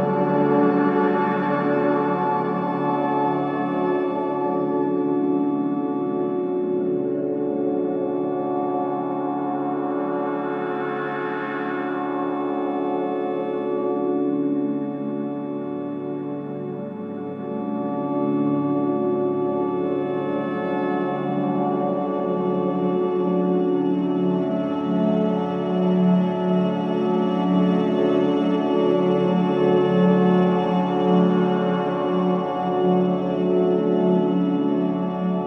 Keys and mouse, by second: 0.1 click, 1.1 click, 1.8-3.7 drag, 4.0 click, 4.9-6.0 drag, 6.3 click, 7.8-9.7 drag, 11.1 click, 12.3 click, 13.4 alt+click, 15.2 ctrl+s, 16.2-19.7 drag, 22.7 ctrl+s, 25.0-26.0 drag, 26.5 click, 28.1 F5, 29.6 click, 31.1-33.9 ctrl+drag.